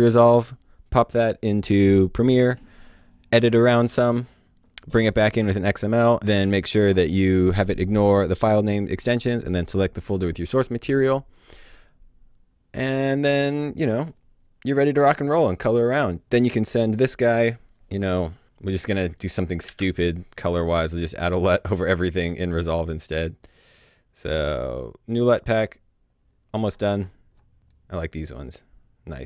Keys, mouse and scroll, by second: 18.4 click, 19.6 s, 20.6 right click, 25.3-26.7 scroll down 1, 26.8 scroll down 1, 27.6 click.